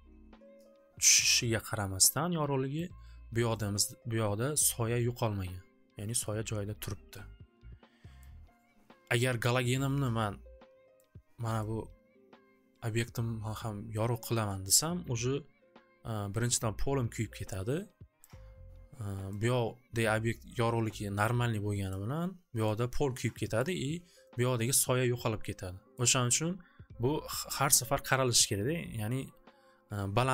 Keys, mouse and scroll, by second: 2.8-7.9 drag, 8.3-9.5 drag, 11.0 click, 15.1 click, 18.3 click, 22.0 click, 23.6 click, 25.9 click, 29.0-30.3 drag.